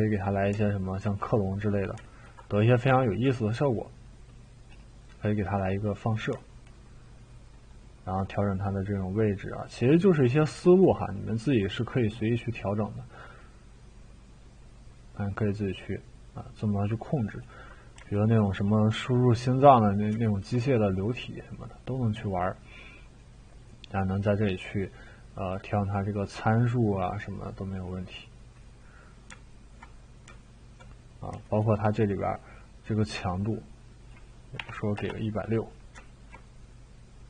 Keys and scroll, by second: 34.6 6, 35.0 Return.